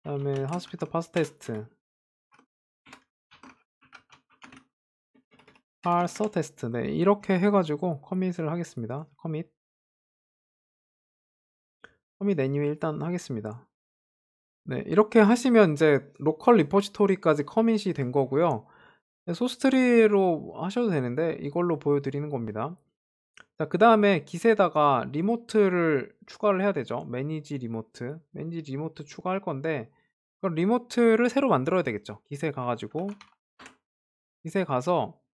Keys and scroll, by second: 6.3 Tab.